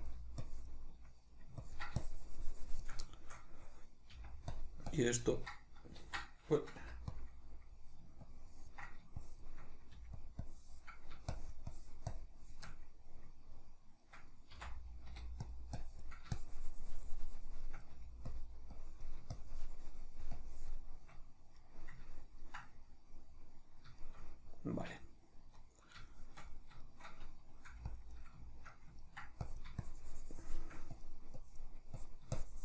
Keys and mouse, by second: 0.4-3.1 shift+drag, 3.1-4.6 shift+middle drag, 4.1 f, 4.9-7.2 ctrl+drag, 6.1 ctrl+z, 7.3 middle click, 8.2-10.2 ctrl+drag, 9.9 f, 10.4-12.7 drag, 12.7-15.5 middle drag, 14.6 c, 15.8-18.4 drag, 17.9 f, 18.7-21.7 drag, 21.7-28.0 middle drag, 27.7 f, 28.0 click, 28.5-29.5 shift+middle drag, 29.5-32.6 drag.